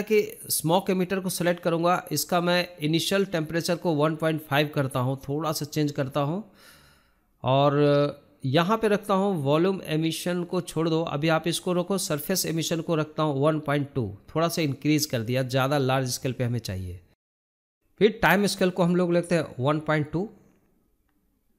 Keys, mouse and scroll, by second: 15.3 scroll down 1, 19.5 scroll up 1, 20.3-21.1 drag, 21.1-21.5 scroll up 1.